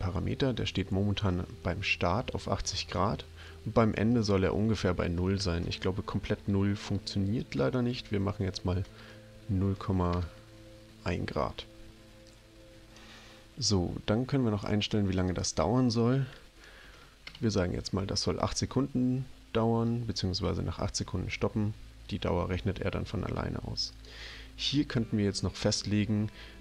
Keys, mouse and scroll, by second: 4.2 click, 5.6 BackSpace, 7.9 ], 8.8 BackSpace, 10.0 BackSpace, 10.3 1, 15.3 click, 16.9 BackSpace, 17.3 8, 23.9 click.